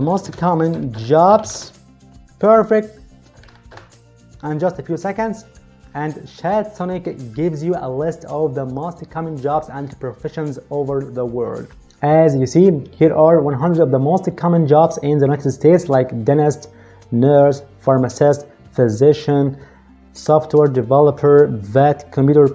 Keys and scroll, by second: 0.0-1.8 typing, 3.4 shift+/, 3.6 Return.